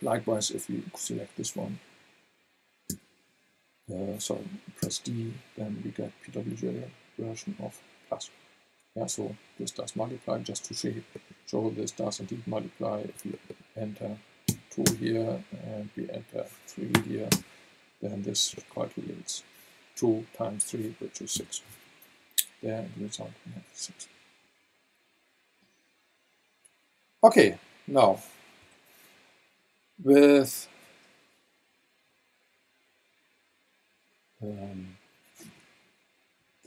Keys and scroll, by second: 2.9 v, 4.8 d, 14.5 KP_2, 14.8 Return, 16.9 KP_3, 17.3 Return, 21.3 v, 28.6 Down.